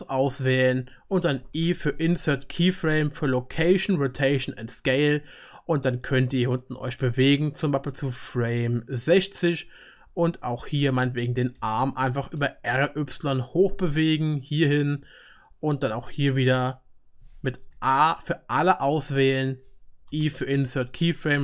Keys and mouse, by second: 1.5 i, 11.6 r, 14.8-17.8 middle drag, 17.7 a, 20.1 i.